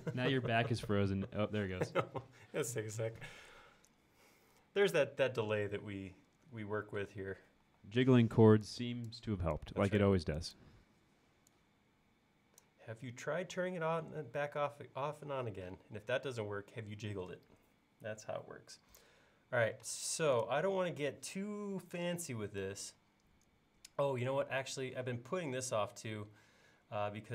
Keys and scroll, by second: 7.7 e, 19.9 space.